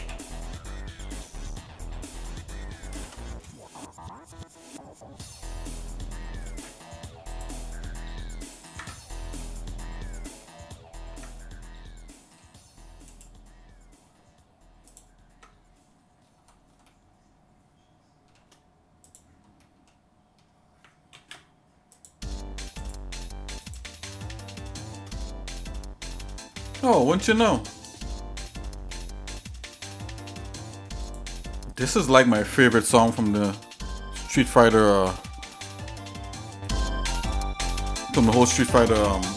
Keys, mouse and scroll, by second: 0.0 l, 0.6-1.0 scroll down 2, 1.3 shift+middle click, 2.9 ctrl+i, 4.0-4.5 scroll up 2, 6.4 alt+n, 8.8 Tab, 9.2 middle click, 9.5-9.8 scroll down 2, 10.1 middle click, 10.7-11.0 scroll up 1, 11.1 Tab, 12.1 middle click, 13.1-14.9 right drag, 15.3 Tab, 16.2 scroll down 1, 16.8-18.3 shift+middle drag, 19.0 click, 19.6 middle click, 21.1 ctrl+a, 22.8-23.9 right drag, 24.5 shift+middle click, 25.2 middle click, 25.7 middle click, 26.5 shift+middle click, 27.2 middle click, 27.6 middle click, 28.4 middle click, 28.9 shift+middle click, 29.9 shift+middle click, 31.0 click, 39.1 shift+middle click.